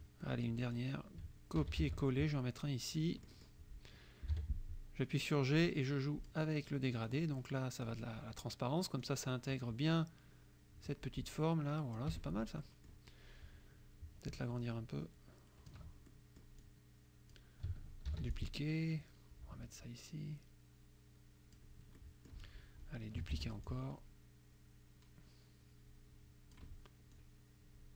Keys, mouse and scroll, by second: 0.2 click, 1.6 ctrl+c, 1.8 ctrl+v, 2.4 ctrl+click, 4.3 g, 5.5 click, 7.1 click, 9.1-12.2 drag, 12.2 F1, 12.7 click, 14.5-15.9 ctrl+drag, 16.1 ctrl+click, 18.2 ctrl+d, 18.5-21.8 ctrl+drag, 22.0 click, 23.3 ctrl+d, 23.7-26.8 ctrl+drag, 27.2-27.9 drag.